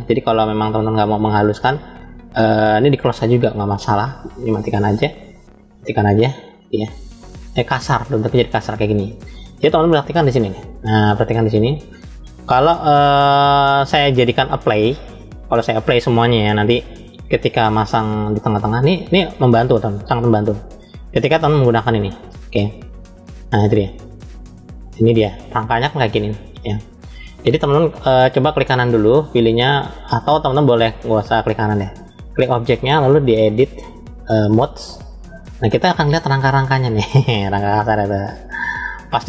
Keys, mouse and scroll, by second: 5.2 drag, 6.6 click, 20.0 click, 22.9 click, 23.8 click, 25.0-27.2 middle drag, 27.5 scroll up 2, 28.7-29.9 right drag, 29.9 click, 31.0-31.7 middle drag, 32.0 click, 33.4-34.3 drag, 35.9 middle click, 36.9-37.8 scroll up 2, 37.8 middle click, 38.9 shift+middle click.